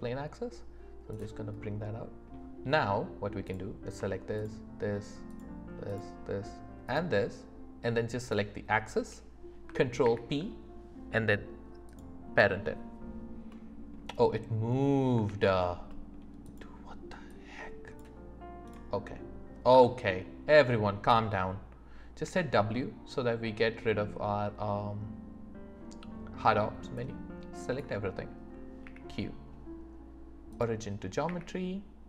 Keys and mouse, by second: 1.1-1.6 right drag, 1.6 middle click, 5.3 shift+click, 5.9 shift+click, 8.3 shift+click, 10.0 ctrl+p, 13.5 click, 13.5 right click, 15.3 ctrl+z, 15.9 click, 15.9 right click, 16.4 click, 17.3 click, 18.7-19.7 drag, 18.7-19.7 right drag, 19.7 Escape, 22.2 w, 27.1 click, 28.8 q, 31.3 q.